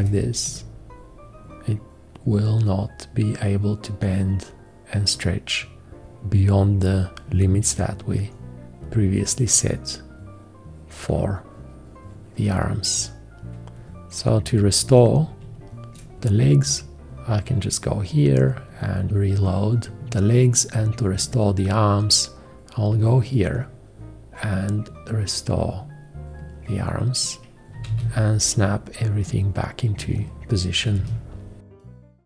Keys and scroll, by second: 14.9 v, 27.8 1, 27.9 `, 31.0 `.